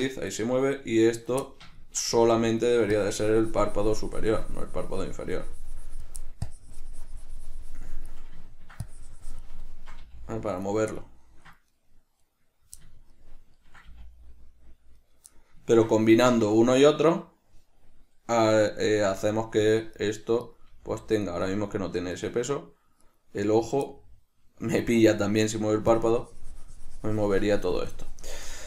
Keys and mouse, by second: 0.6 right click, 1.7-3.0 shift+middle drag, 2.4 g, 3.0 right click, 3.2-6.5 drag, 6.5 middle click, 6.7-8.7 drag, 8.7 ctrl+middle click, 9.1 click, 9.9-11.0 ctrl+middle drag, 10.3 g, 11.0 right click, 11.2 middle click, 12.0 right click, 12.5 right click, 13.1-15.4 middle drag, 14.2 g, 15.4 right click, 15.6-17.1 middle drag, 17.1 right click, 18.8 right click, 19.4 g, 20.7 right click, 21.0 g, 21.6 right click, 22.4 right click, 23.4 right click, 23.7 right click, 24.2-26.2 middle drag, 26.2-28.6 drag.